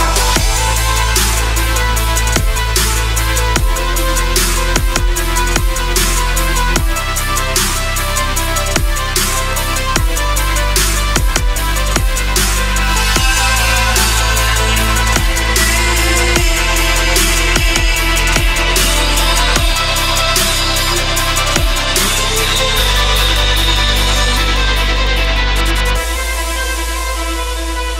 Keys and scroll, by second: 0.7 c, 4.1 F3, 4.4 Escape, 16.5 shift+Page_Down, 22.9 shift+Page_Down, 24.7 Escape, 25.7 shift+F2, 26.8 F9.